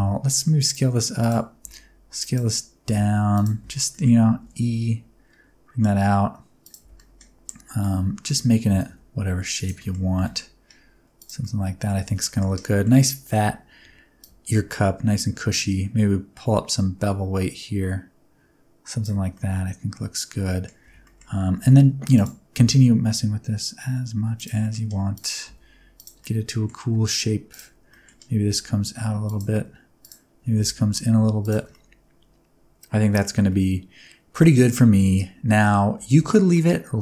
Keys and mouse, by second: 0.6 click, 1.2 alt+click, 1.6 s, 2.2 click, 2.8 s, 3.3 click, 3.6 a, 3.9 middle click, 4.4 e, 6.6 click, 6.8 Tab, 6.9 middle click, 7.4 middle click, 8.0 Tab, 8.7 g, 8.8 y, 9.5 click, 9.7 middle click, 10.1 g, 11.1 click, 11.5 middle click, 12.0 Tab, 12.2 middle click, 12.7 middle click, 14.2-19.0 shift+drag, 19.3-20.6 middle drag, 20.8 Tab, 21.0 middle click, 21.6 1, 22.5 s, 24.3 click, 25.1 alt+click, 25.4 s, 25.9 click, 26.3 middle click, 27.5 alt+click, 27.9 middle click, 28.4 s, 29.2 click, 30.0 alt+click, 30.5 s, 31.4 click, 31.5 Tab, 31.7-33.2 middle drag, 33.4 middle click, 34.7 middle click, 36.5-37.0 middle drag.